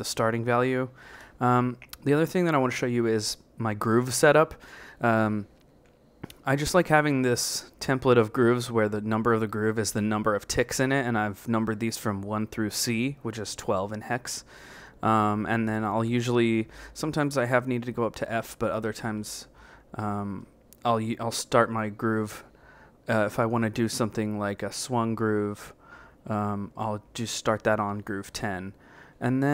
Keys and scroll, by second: 0.7-1.5 typing, 4.0 Down, 5.4 b, 5.7 Right, 7.2 Right, 7.7 Right, 8.3 Right, 9.1 Right, 9.5 Right, 9.9 Right, 10.3 Right, 10.6 Right, 11.0 Right, 11.4 Right, 13.3 b, 14.6 Left, 15.1 Left, 16.7 b, 16.9 Right, 17.9 Right, 18.6 Right, 19.0 Right, 24.1 a, 24.8 Up, 25.9 Up, 26.6 Down, 27.0 Down, 28.3 Left.